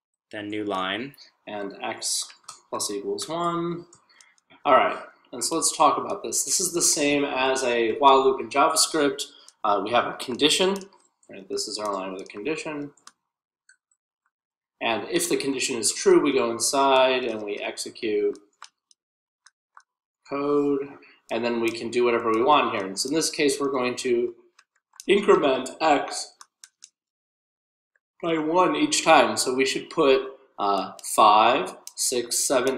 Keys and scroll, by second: 2.5 p, 2.9 *, 4.5-20.0 typing, 21.7-23.0 typing, 30.4-32.7 typing.